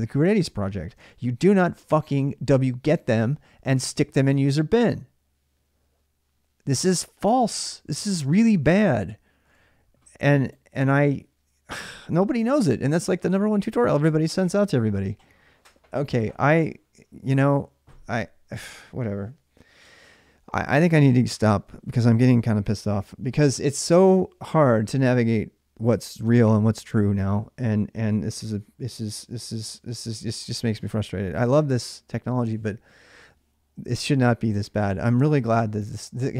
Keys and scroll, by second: 0.8 alt+Tab, 9.3 alt+Tab.